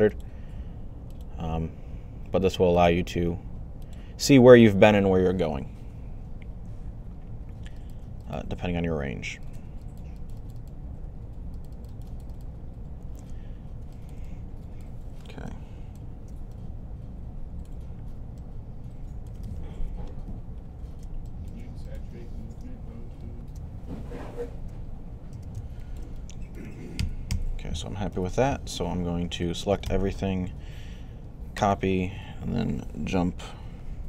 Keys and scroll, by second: 19.6 1, 26.8-27.9 typing.